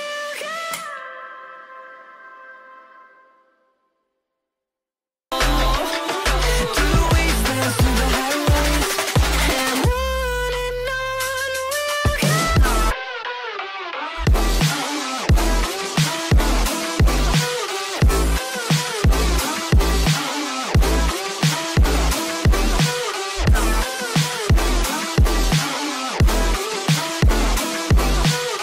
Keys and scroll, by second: 0.4 F3, 2.5 F3, 2.7 F2, 6.1 ctrl+r, 7.1 ctrl+g, 7.5 c, 15.7 space, 15.9 F2, 22.2 space, 24.4 F3, 26.7 F4, 27.2 F2.